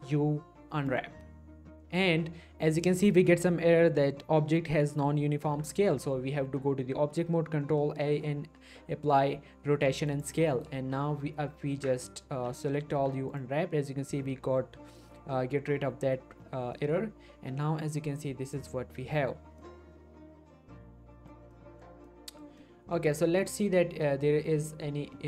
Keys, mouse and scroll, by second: 0.0 u, 0.9 click, 6.7 Tab, 8.1 ctrl+a, 10.1 click, 11.7 Tab, 12.3-13.0 typing, 13.3 click, 14.6 scroll up 1, 16.5 scroll down 1, 16.7 middle click, 17.4-18.5 scroll up 1, 18.5 click, 19.1 middle click, 19.5 scroll up 1, 19.9-21.5 middle drag, 21.2 scroll up 1, 22.3-23.2 middle click, 23.4 click, 23.8-25.1 scroll down 1, 25.1 middle click.